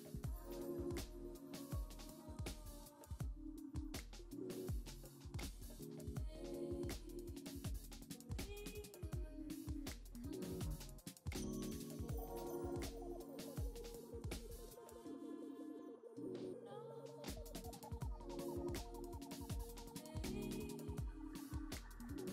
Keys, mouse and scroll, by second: 1.4-2.1 scroll down 3, 2.1-3.5 middle drag, 4.2 shift+middle click, 5.1-5.5 scroll up 2, 5.5-7.1 middle drag, 11.5-13.0 drag, 16.0-17.9 middle drag, 17.9-19.4 drag.